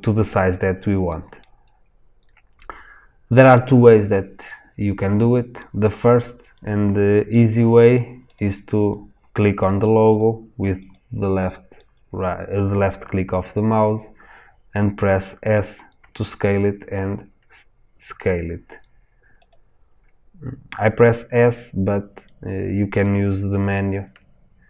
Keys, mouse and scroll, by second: 8.3 click, 16.0 s, 19.4 click, 23.0 scroll down 1.